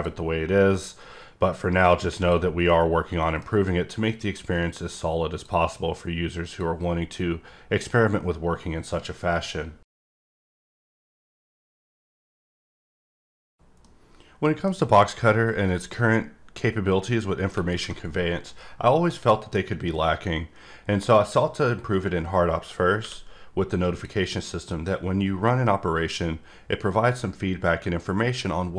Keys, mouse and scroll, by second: 0.8 click, 2.7 middle click, 4.4 click, 6.4 click, 15.7 click, 23.8 click, 24.1 click.